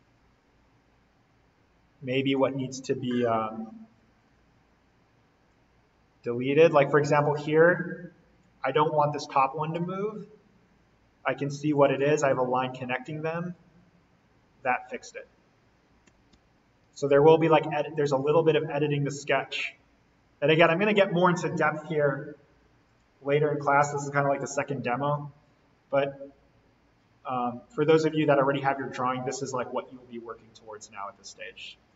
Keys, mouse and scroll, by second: 2.3 click, 4.1 Delete, 5.4-9.7 drag, 9.7 ctrl+z, 10.6-11.7 scroll down 1, 11.7 click, 13.1 Delete, 13.5-15.2 drag, 15.2 scroll up 1, 16.0-17.1 typing, 18.1 click, 18.4 d, 19.1 click, 23.5 Escape, 24.5-24.8 scroll up 1, 27.7-28.3 scroll down 1, 28.3-29.2 scroll up 1, 29.2 click.